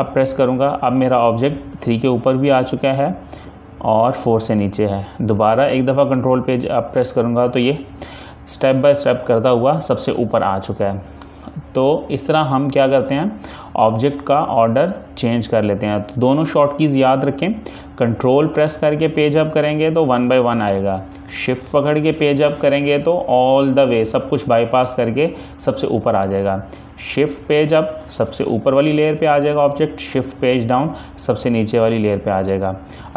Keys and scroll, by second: 0.2 ctrl+Page_Up, 5.3 Page_Up, 6.2 ctrl+Page_Up.